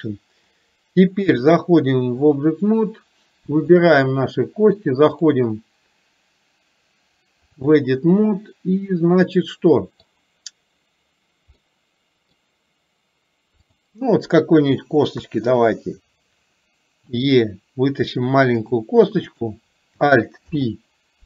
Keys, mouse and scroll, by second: 1.7 click, 3.9 click, 5.3-7.8 drag, 8.4-10.2 middle drag, 11.8 middle click, 13.7 click, 15.2 KP_3, 17.2 e.